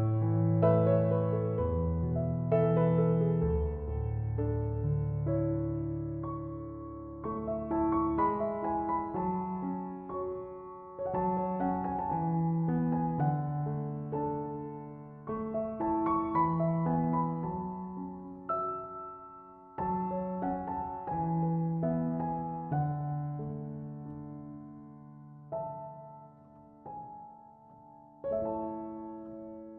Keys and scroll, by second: 10.7-11.5 typing, 19.9 typing.